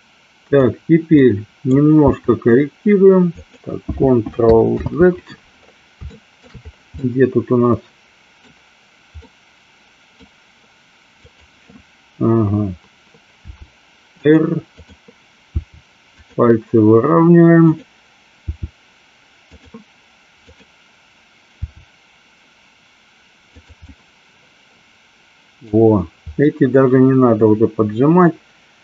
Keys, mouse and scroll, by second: 0.5 click, 1.3-1.9 middle drag, 2.3 r, 3.5 click, 4.8 ctrl+z, 6.2 shift+middle click, 7.1-8.5 middle drag, 9.4 middle click, 13.5 r, 14.9 click, 15.6 r, 16.3 click, 17.7 click, 18.5 r, 19.6 click, 20.5 click, 21.6 r, 23.6 click, 23.8-25.7 middle drag, 26.6-28.8 middle drag.